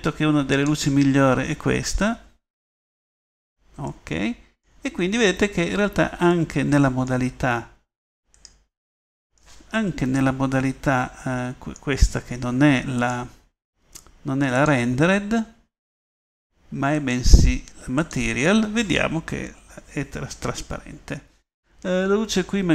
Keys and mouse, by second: 4.0-4.5 middle drag, 8.4-9.1 drag, 8.9 middle click, 9.1 middle click, 9.3-10.3 middle drag, 10.9-11.5 middle drag, 15.0 right click, 18.1-18.9 middle drag, 22.6 middle click.